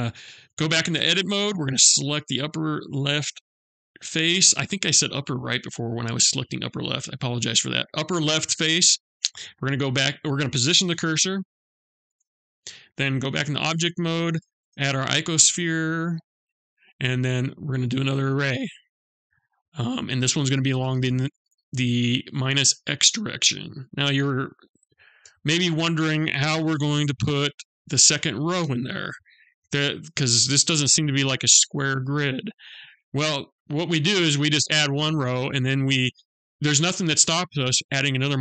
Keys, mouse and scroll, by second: 0.4 Tab, 1.6 click, 10.4 shift+s, 12.8 Tab, 13.8 shift+a, 18.2 click, 22.9 click.